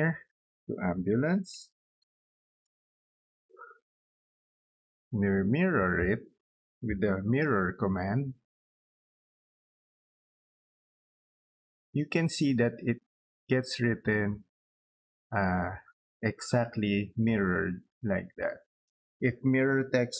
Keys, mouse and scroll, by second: 0.5 Caps_Lock, 0.9-2.9 typing, 3.7 click, 4.6 click, 4.9 click, 5.4 middle click, 6.2 middle click, 6.7-7.4 typing, 7.8 click, 8.5 click, 10.0 space, 10.8 scroll up 2, 11.3 middle click, 11.7 scroll down 2, 13.6 middle click, 17.5 middle click, 19.5-20.1 typing.